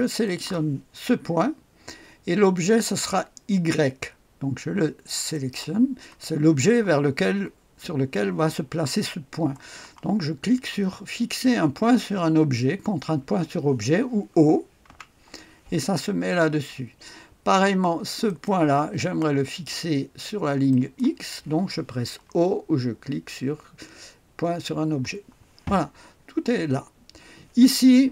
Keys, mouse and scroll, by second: 0.2 click, 5.3 click, 5.8 click, 14.8 o, 18.3 click, 20.7 click, 24.9 o.